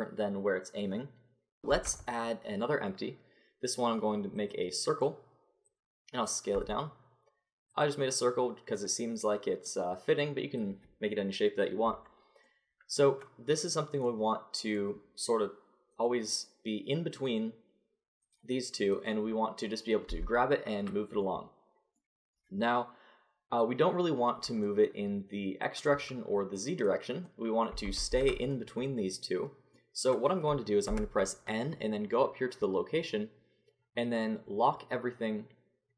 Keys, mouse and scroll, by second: 1.7 shift+a, 5.7-7.7 drag, 6.5 s, 10.1-12.5 drag, 15.9-20.8 drag, 20.1 g, 25.6-27.5 drag, 27.8 ctrl+z, 28.1 ctrl+z, 30.9 n.